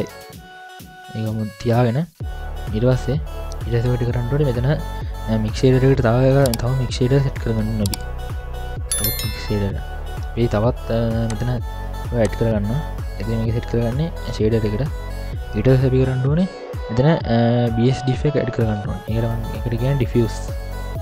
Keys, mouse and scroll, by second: 0.8 middle click, 3.4 click, 3.4 scroll down 3, 3.9 middle click, 4.7 middle click, 8.0 ctrl+alt+a, 12.2-14.0 drag, 19.0 ctrl+alt+a.